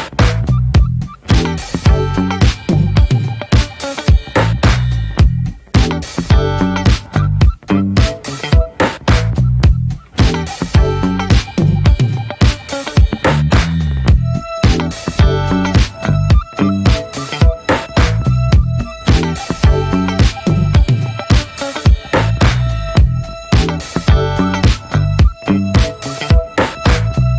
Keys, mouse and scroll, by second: 0.1 /, 0.5 middle drag, 0.8 ctrl+s, 1.1-1.5 drag, 1.5 /, 1.7-2.1 middle drag, 2.1 Tab, 2.3 scroll up 1, 2.5-3.3 shift+middle drag, 3.3 ctrl+r, 6.2 click, 6.3 scroll down 1, 6.5 shift+middle drag, 6.7 click, 6.9 ctrl+a, 7.2 Tab, 7.4 middle click, 7.7 scroll down 2, 8.0 shift+middle click, 8.1 scroll up 1, 8.4-9.1 alt+shift+drag, 9.1 shift+middle click, 9.2-9.6 scroll up 1, 9.6-10.0 alt+shift+drag, 10.0-10.8 right drag, 10.8 a, 11.8 right click, 12.4 scroll down 2, 12.6-13.1 middle drag, 13.1 Tab, 13.2-13.7 middle drag, 13.7 ctrl+s, 13.8 click, 14.3 /, 14.5-14.8 middle drag, 14.8 scroll up 1, 15.1 ctrl+s, 15.2-15.6 middle drag, 15.6 drag, 15.8-17.0 middle drag, 17.0 /, 17.2-18.1 middle drag, 18.1 Tab, 18.4 middle click, 18.8 3, 18.9 click, 19.0 scroll down 2, 19.3 middle click, 20.2 click, 20.4-20.8 scroll up 1, 20.8 click, 21.5 x, 22.7-24.5 middle drag, 24.5 k, 26.9 middle click.